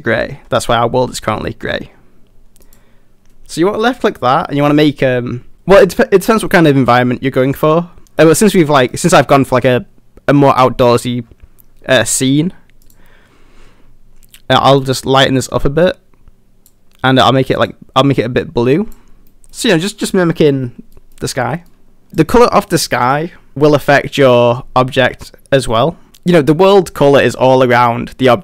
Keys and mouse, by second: 8.9 middle drag, 19.3 middle click, 19.8 middle click, 21.0 middle drag, 21.7-22.0 middle drag, 25.6 middle click, 26.4-26.7 middle drag, 27.0-28.4 middle drag.